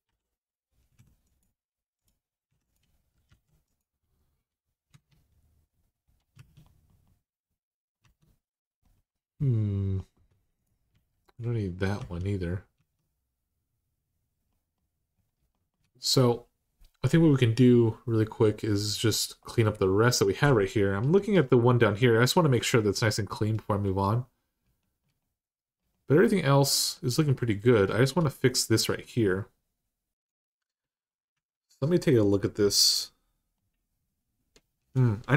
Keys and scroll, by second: 0.0-0.7 typing, 2.3-3.6 typing, 4.7 Caps_Lock, 6.1 Tab, 7.8 Tab, 10.7 x, 11.8 Tab, 12.6 Tab, 20.8 Tab, 31.1 Tab, 35.2 1.